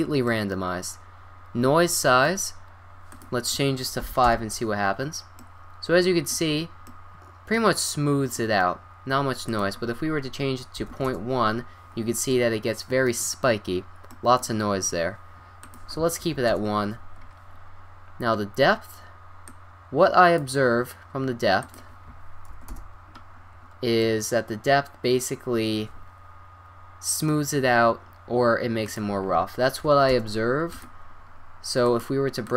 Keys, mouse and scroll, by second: 3.1-4.7 drag, 5.4-6.9 middle drag, 9.5-10.7 drag, 12.3-14.4 middle drag, 15.6 click, 17.1 click, 18.5-19.5 scroll down 1, 19.5-21.3 drag, 21.6-23.3 drag, 24.0-25.6 middle drag, 28.8-30.0 drag, 30.1-32.5 drag.